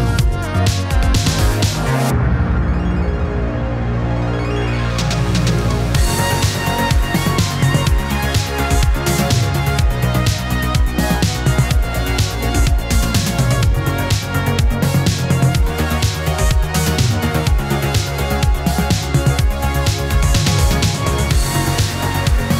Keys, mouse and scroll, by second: 10.6-11.6 drag, 13.5-15.4 drag, 17.5-19.1 drag, 21.1-22.5 drag.